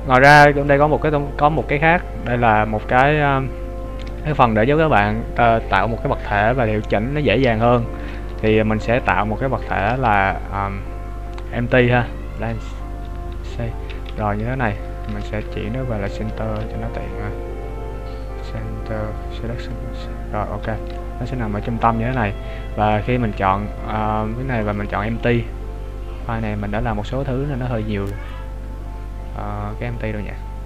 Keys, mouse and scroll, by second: 0.8 click, 9.7 shift+a, 15.0 shift+s, 21.6 z, 23.0 right click, 23.6-24.3 scroll down 3, 24.7 click.